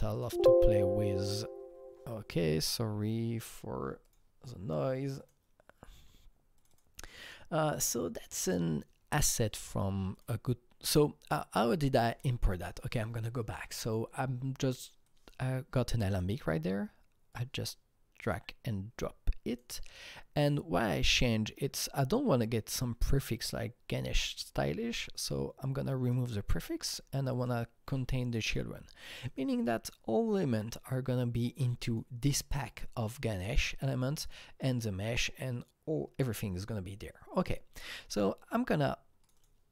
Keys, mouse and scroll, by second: 0.1 click, 2.6 click, 4.0 click, 5.2 click, 6.6 click, 6.7 double click, 8.2-12.5 drag, 12.5-15.1 drag, 15.1-19.5 drag, 21.7 click, 27.4 click, 29.3 click, 34.2 click, 39.2 click, 39.4 double click.